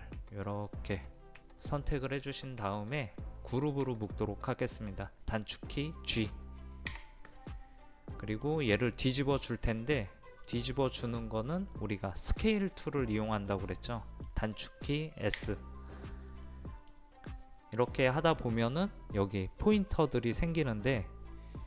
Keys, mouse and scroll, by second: 6.9 a, 8.2-11.4 middle drag, 15.4 s, 16.5 middle click.